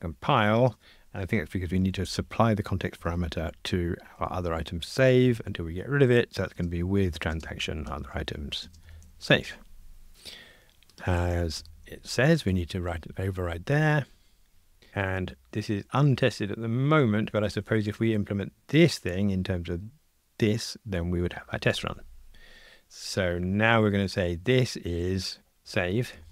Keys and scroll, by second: 10.1 F2, 11.5 alt+Return.